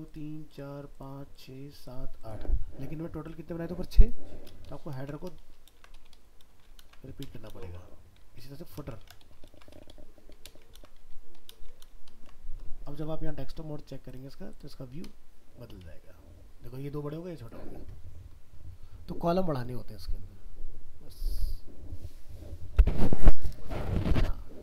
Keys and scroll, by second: 5.4 ctrl+shift+Left, 5.7 ctrl+c, 6.8 ctrl+v, 9.1 ctrl+Left, 9.5 ctrl+c, 10.7 ctrl+v, 12.1 ctrl+s.